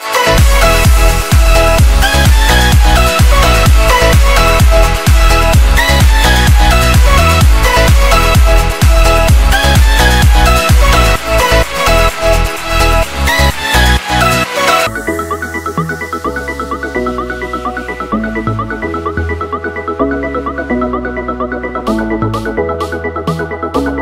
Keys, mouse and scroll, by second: 13.7 w, 17.6 BackSpace, 23.9 BackSpace.